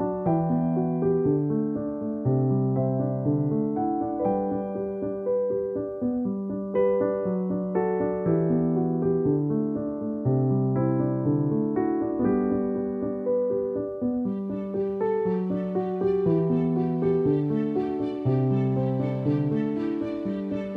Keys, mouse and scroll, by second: 2.1 right click, 2.9 click, 4.8 click, 7.1 click, 9.5 ctrl+alt+click, 10.8 ctrl+-, 12.7 click, 15.5 ctrl+click, 15.9 ctrl+e, 16.9 click.